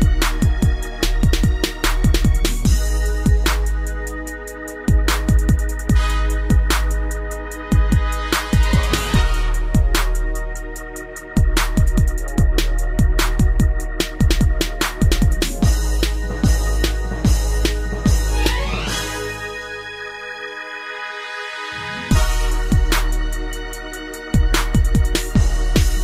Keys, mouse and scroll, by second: 1.8 click, 1.9 click, 2.3 middle click, 2.8 shift+space, 4.5 Escape, 4.8 middle click, 5.1 shift+space, 6.1 Escape, 7.1 click, 9.8 middle click, 10.0 middle click, 10.6 3, 12.7 Left, 13.6 g, 14.8 click, 15.6 Down, 15.8 Down, 16.2 shift+space, 17.3 Escape, 17.7 shift+space, 18.3 Escape, 19.5 click, 21.4 middle click, 21.8 scroll up 3, 22.4 shift+middle click, 22.5 middle click, 22.6 scroll up 1, 23.7 click, 24.9 click, 25.1 click.